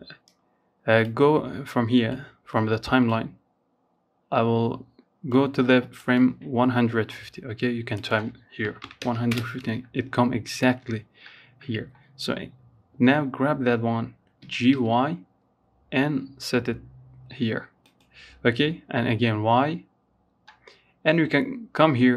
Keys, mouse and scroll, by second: 12.6 g.